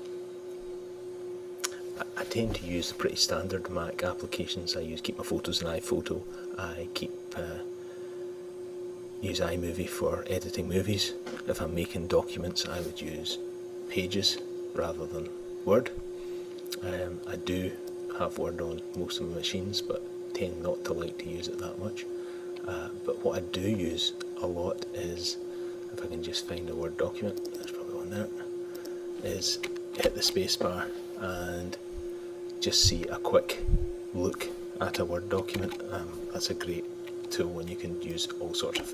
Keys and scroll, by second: 31.0 ⤢.